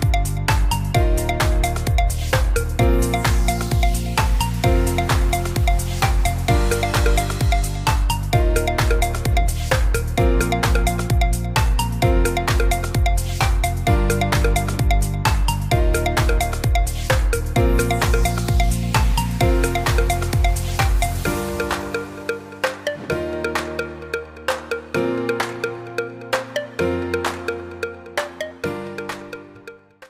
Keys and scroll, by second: 5.9 ctrl+t.